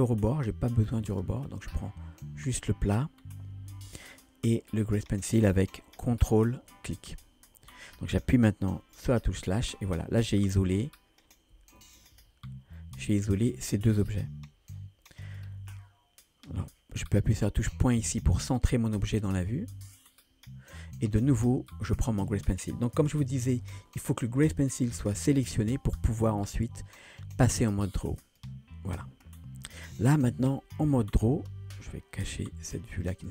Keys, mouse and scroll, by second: 0.3-0.9 scroll up 1, 0.9 scroll up 1, 1.1 click, 1.5 click, 4.8 ctrl+click, 9.1 KP_Divide, 10.7 KP_1, 11.8-12.1 shift+middle drag, 12.3-13.7 scroll up 3, 12.8-13.7 middle drag, 15.3 click, 15.7-16.5 middle drag, 18.1 KP_Decimal, 19.1-20.8 middle drag, 21.7 click, 26.4-28.4 drag, 29.4-30.5 middle drag, 30.6 shift+middle click, 33.1 click.